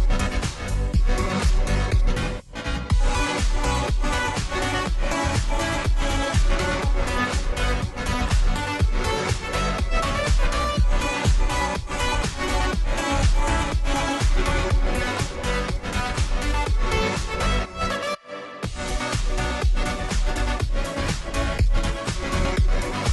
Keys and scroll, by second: 2.5 ctrl+t, 20.1-20.4 space, 21.4 ctrl+j, 22.2 ctrl+t.